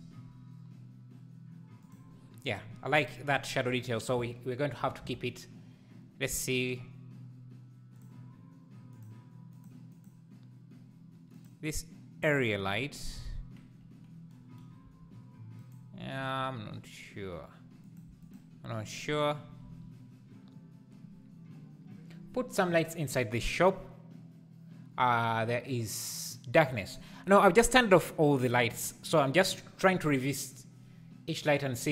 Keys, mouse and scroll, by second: 0.0 g, 8.0 click, 8.9 click, 9.6 click, 10.0 click, 11.5 click, 12.2 scroll down 1, 14.9 g, 16.2 g, 18.1 x.